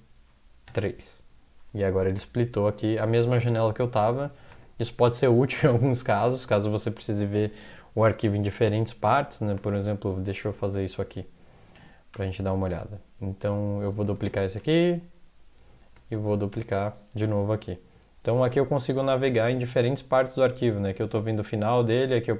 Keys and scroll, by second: 0.7 typing, 5.5 ctrl+x, 5.7 0, 10.2 ctrl+x, 10.5 0, 12.1 ctrl+\, 14.2 ctrl+x, 14.6 2, 16.2 ctrl+x, 16.5 3.